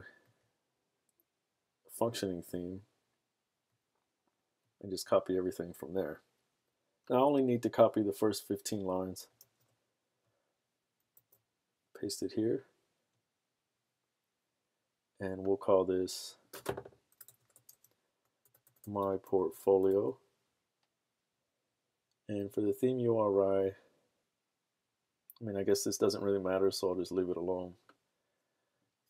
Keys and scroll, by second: 9.4 super+c, 11.2 super+v, 17.0-20.4 typing.